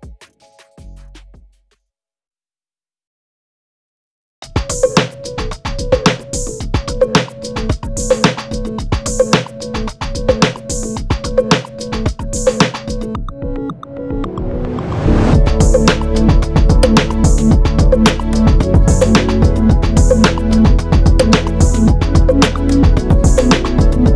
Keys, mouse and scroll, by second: 1.5-2.5 drag, 7.2 ctrl+shift+g, 9.7 click, 13.1 F9, 13.6 click, 20.1 F5.